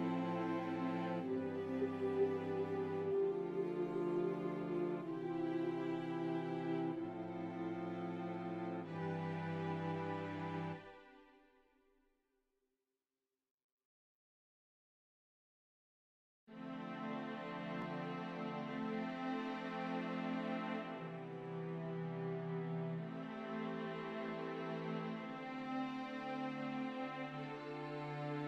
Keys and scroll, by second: 3.7 ctrl+z, 5.8 f, 7.0 ctrl+z, 7.6 ctrl+z, 14.2 ctrl+z, 14.8 z, 18.1 z.